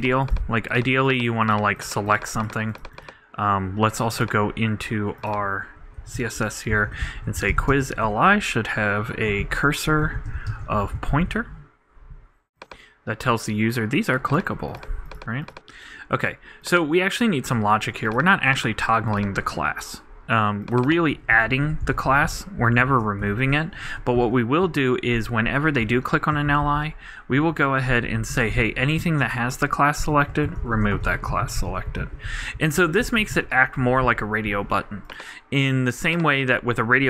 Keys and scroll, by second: 7.8 shift+space, 8.0 shift+Return, 10.0-10.8 typing, 21.4-22.3 typing, 22.8 super+Up, 22.9 super+Right, 23.2 super+Return, 23.7-25.1 typing, 29.0 super+d, 29.1 super+Right, 30.0 super+., 30.6-32.4 typing, 33.3 super+d, 33.4 super+Right, 33.8 super+;.